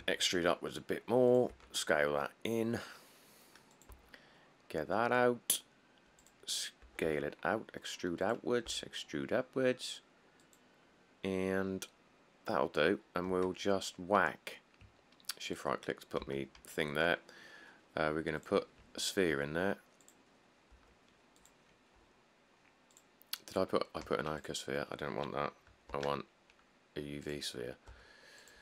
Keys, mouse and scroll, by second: 0.2 e, 1.7 s, 4.1 e, 7.0-7.3 typing, 8.9 e, 13.5 Tab, 14.7 middle click, 14.8 middle click, 16.4 a, 19.5 middle click, 19.5 s, 20.9 s, 22.2 g, 23.4 click, 23.5 middle click, 23.6 middle click, 24.2 x, 26.1 shift+a, 28.1 s, 28.2-28.6 scroll.